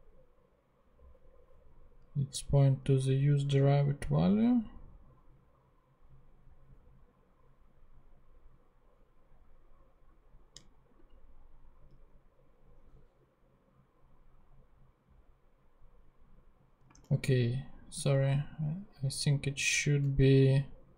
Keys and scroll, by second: 16.9 ctrl+Tab, 18.1 ctrl+Tab.